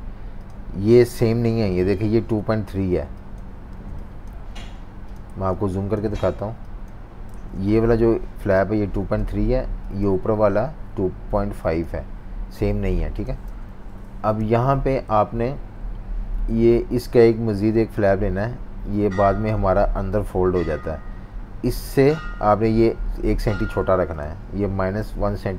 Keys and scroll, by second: 3.7 z, 4.6 v, 5.3 z, 6.1 v, 7.3 super+z, 13.5 super+-, 13.7 super+-, 14.4-15.3 typing, 25.0 -, 25.4 1.